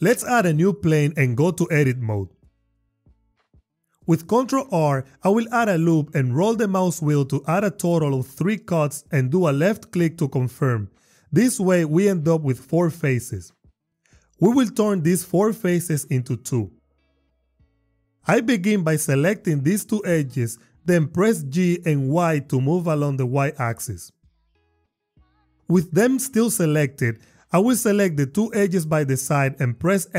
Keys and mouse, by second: 2.7 Tab, 4.5 ctrl+r, 6.8 click, 7.2 click, 9.9 ctrl+r, 10.3 click, 10.8 click, 20.0 shift+click, 22.0 g, 22.7 y, 25.1 click, 28.1 shift+click.